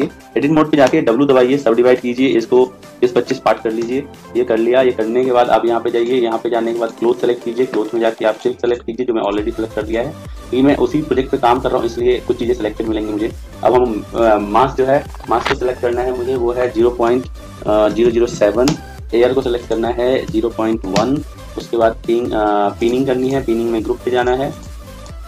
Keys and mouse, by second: 0.8 w, 2.5 click, 5.9 click, 14.1 click, 17.9 0, 19.6 click, 22.7-24.4 drag.